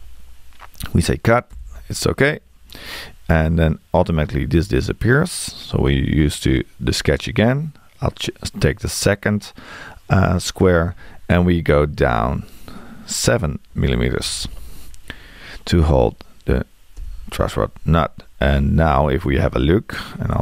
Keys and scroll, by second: 1.5 Return, 12.1 e, 17.0 Return.